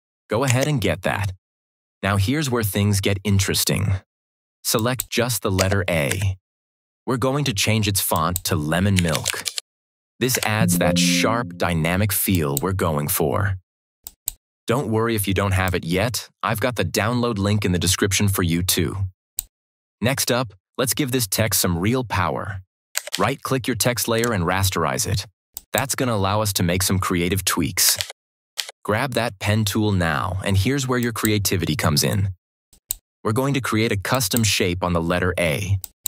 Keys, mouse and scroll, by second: 0.4 Caps_Lock, 4.7 click, 6.1 shift+Left, 8.0 click, 8.6-9.8 typing, 10.2 Return, 12.2-19.3 drag, 22.9 ctrl+click, 23.0 ctrl+=, 24.0 right click, 25.5 click, 27.9 ctrl+=, 30.9 click, 35.7 click.